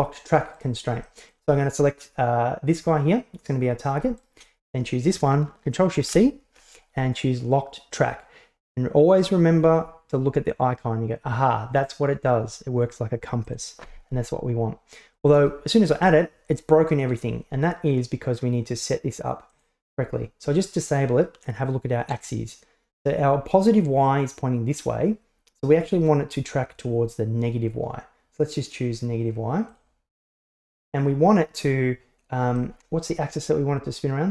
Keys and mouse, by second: 0.6-1.0 right drag, 1.1 shift+middle drag, 4.3 shift+right drag, 6.1 ctrl+shift+c, 19.6 click, 29.8 click, 32.6-33.2 middle drag.